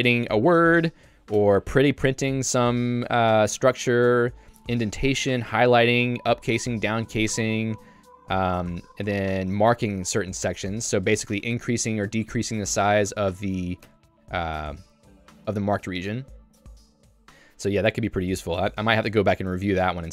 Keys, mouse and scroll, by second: 1.4-3.0 typing, 3.9 Escape, 4.2 k, 8.5 j, 10.5 Escape, 10.8 k, 11.5 shift+v, 11.9 k, 14.0 Escape, 14.9 h, 15.3 j, 17.6 ctrl+u, 18.1 j, 18.8 k, 19.5 Tab.